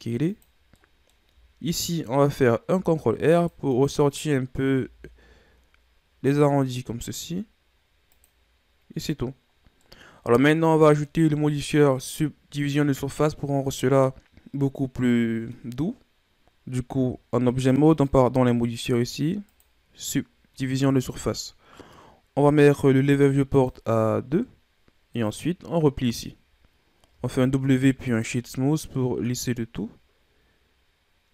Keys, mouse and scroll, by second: 0.7-2.7 middle drag, 2.7 ctrl+r, 4.7 s, 9.0-9.5 scroll down 2, 9.5 scroll down 2, 9.7-11.2 middle drag, 11.2 Tab, 11.7-13.5 middle drag, 13.5-14.0 scroll up 1, 14.2-15.6 middle drag, 17.9-20.9 drag, 23.5-27.1 drag, 27.1 w, 28.9-31.3 middle drag.